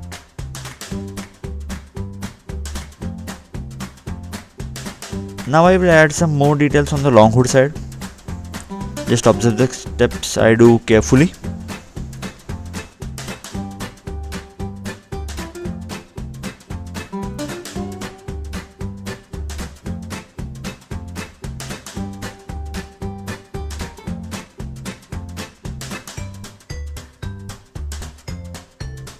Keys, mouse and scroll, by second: 1.1 click, 3.3 click, 3.6 scroll up 2, 4.4 scroll down 2, 5.1 click, 5.4 click, 6.3 Delete, 6.7 click, 9.2 double click, 9.8 Escape, 11.1 Delete, 11.4 scroll down 2, 13.3 click, 15.6 click, 15.9-16.6 scroll up 3, 16.7 scroll down 2, 17.8 scroll up 2, 18.0 scroll down 2, 18.2 scroll up 2, 18.7-19.1 scroll down 2, 20.5 click, 21.7 click, 22.3 Escape, 22.3 scroll up 1, 22.6 middle click, 23.3 scroll down 2, 24.3 click, 26.0 click, 26.0 middle click, 28.5 click, 28.5 middle click.